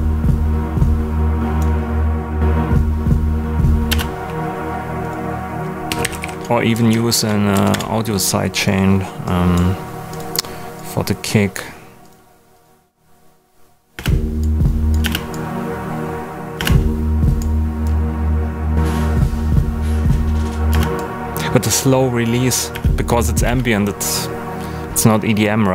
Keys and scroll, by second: 3.8 space, 5.6-6.7 typing, 6.7 Down, 7.5 Up, 7.7 Return, 13.9 space, 16.5 space, 20.7 space, 22.7 space.